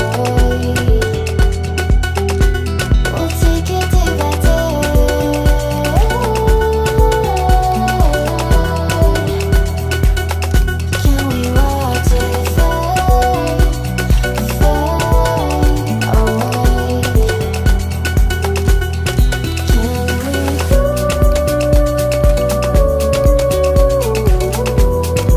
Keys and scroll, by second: 0.9 Escape, 8.8 Escape.